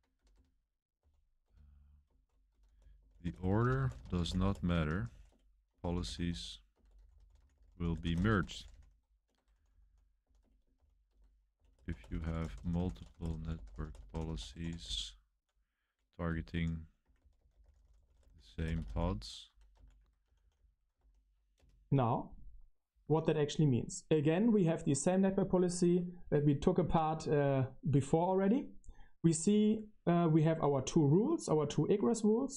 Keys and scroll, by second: 0.0-21.7 typing, 0.9 Escape.